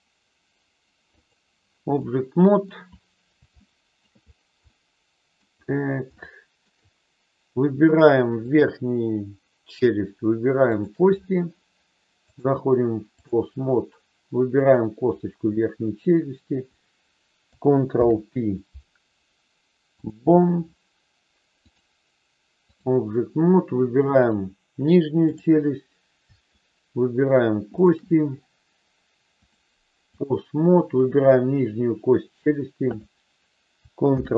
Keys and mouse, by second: 1.9 middle click, 3.6 shift+middle click, 4.6 middle click, 6.2 shift+middle click, 10.8 shift+click, 12.3-13.3 drag, 14.5-15.9 drag, 17.9 ctrl+p, 21.5-22.8 drag, 25.2 click, 27.6 shift+click, 29.4 click, 34.0 ctrl+p.